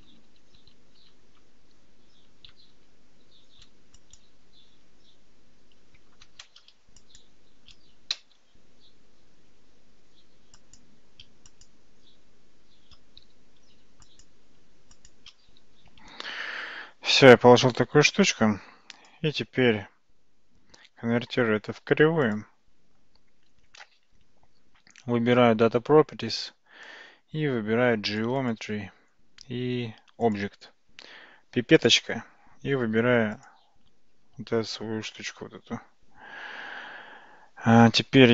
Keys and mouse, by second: 0.1 ctrl+z, 0.3 ctrl+z, 0.6 ctrl+z, 1.0 ctrl+z, 2.7 ctrl+z, 4.1 click, 7.1 shift+click, 8.2 f, 10.6 click, 11.6 shift+click, 13.2 f, 14.1 click, 15.0 shift+click, 15.5 f, 16.5 Tab, 18.9-22.4 drag, 28.2 click, 30.3 click, 31.9 click, 37.1 Tab, 37.7 Tab.